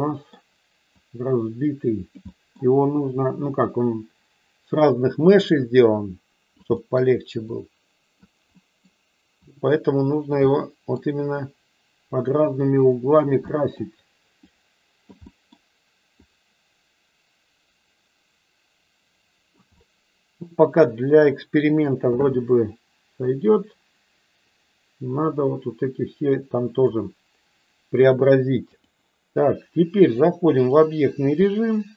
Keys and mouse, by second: 1.0-2.1 drag, 2.2 middle click, 2.9-6.5 drag, 6.8 middle click, 7.4 click, 8.5 middle click, 9.4-10.4 drag, 10.4 middle click, 11.4-13.2 drag, 13.4 middle click, 14.4 click, 15.2 middle click, 16.2-19.4 drag, 19.8-21.8 middle drag, 23.2-26.9 drag, 28.1 click.